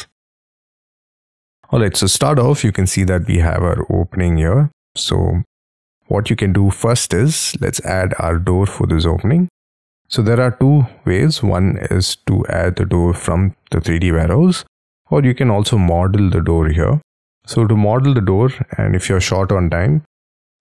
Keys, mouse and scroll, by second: 1.0 scroll down 1, 1.2-2.7 scroll up 18, 2.8 middle click, 5.0 scroll down 5, 5.6 middle click, 7.2 scroll down 6, 15.6 scroll up 5, 15.9 middle click.